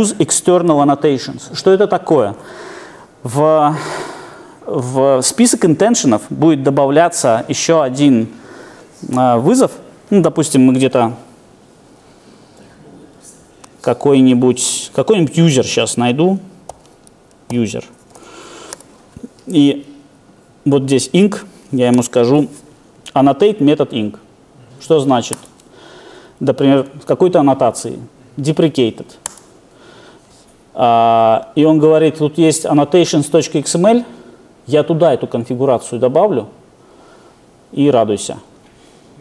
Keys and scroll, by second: 16.7 super+o, 21.9 alt+Return.